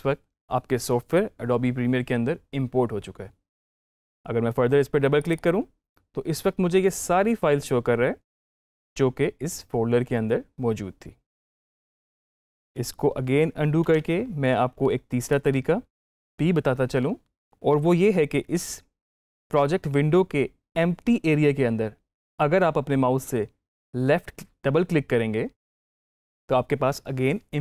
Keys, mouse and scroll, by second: 5.1 click, 8.4-13.3 drag, 13.7 ctrl+z, 15.1 click, 25.5 click.